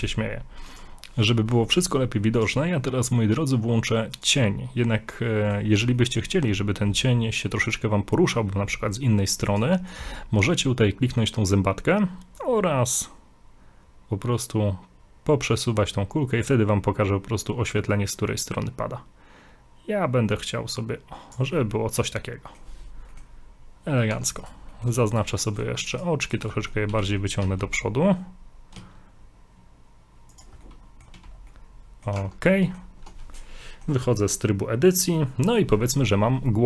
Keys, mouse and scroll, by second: 0.7 click, 2.4 click, 5.1 middle click, 6.0 middle click, 7.7 click, 21.7 middle click, 23.1 middle click, 24.1 scroll up 2, 24.4 right click, 24.7 right click, 24.9 middle click, 25.1 shift+right click, 25.4 middle click, 25.9 shift+right click, 26.3 shift+right click, 26.5 middle click, 26.9 g, 30.6 middle click, 31.2 a, 31.3 scroll down 2, 31.5 middle click, 32.2 Tab, 32.6 middle click, 33.4 middle click, 34.1 middle click.